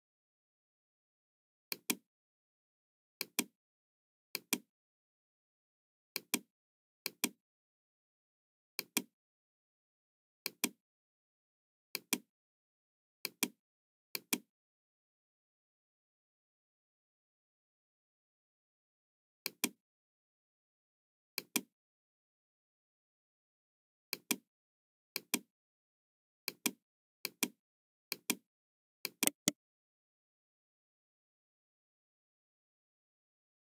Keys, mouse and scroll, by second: 1.7 click, 3.1 click, 4.2 click, 6.1 click, 6.9 click, 8.7 click, 10.3 click, 11.9 click, 13.2 click, 14.1 click, 15.2 KP_5, 16.3 Return, 19.4 click, 21.3 click, 22.0-22.3 scroll down 1, 22.4 middle click, 24.0 click, 25.1 click, 26.3 click, 27.1 click, 28.0 click, 28.9 click, 29.2 right click.